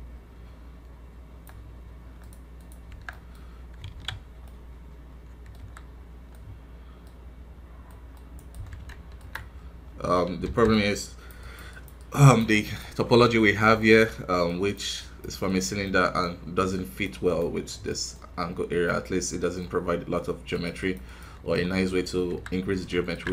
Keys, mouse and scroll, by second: 3.0 middle click, 3.3 scroll up 1, 3.8 alt+a, 4.0 scroll down 4, 4.4-5.5 middle drag, 5.5 KP_1, 5.8 scroll down 1, 6.2 scroll up 1, 7.2 scroll up 1, 7.8-8.8 middle drag, 8.8 ctrl+Tab, 9.6-10.4 scroll up 1, 10.4 i, 10.6-13.2 drag, 13.2 middle click, 14.0 scroll up 1, 14.9 click, 15.8-17.2 middle drag, 17.2 click, 17.5 scroll down 1, 17.8 middle click, 18.1 scroll up 2, 18.8-20.5 middle drag, 20.5 click, 21.4 KP_3, 21.8-22.2 scroll down 1, 22.2 KP_1, 22.8 ctrl+Tab.